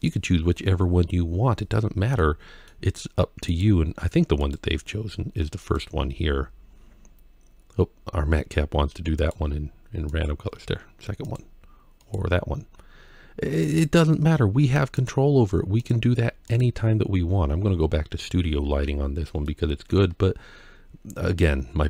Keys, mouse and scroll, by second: 1.7 click, 2.0 middle click, 18.7-19.3 scroll down 2, 19.3 middle click, 20.4 scroll up 2.